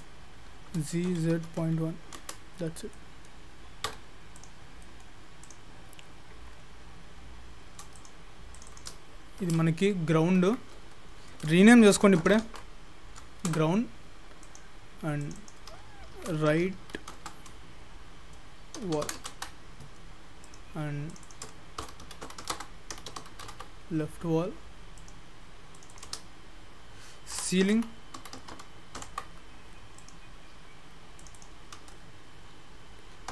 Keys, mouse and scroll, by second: 0.7 g, 2.7-3.8 scroll down 4, 3.8 middle click, 3.9 Tab, 4.4 click, 4.7-5.5 scroll down 2, 4.8 middle click, 5.5 click, 8.0 click, 8.5 click, 8.7 click, 14.4 click, 15.2 click, 15.4 click, 19.2 l, 20.5 click, 21.1 click, 21.3 click, 23.4 l, 25.0 click, 25.8 click, 26.0 click, 30.0 click, 31.2 click, 31.4 click.